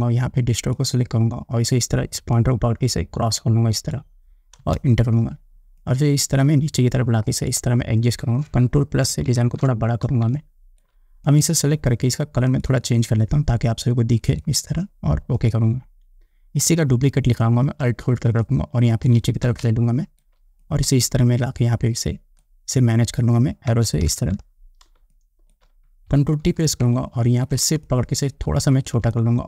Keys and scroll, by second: 4.8 Return, 9.3 ctrl+=, 10.5 space, 19.8 space, 23.9 Up, 25.2 space, 26.7 ctrl+t.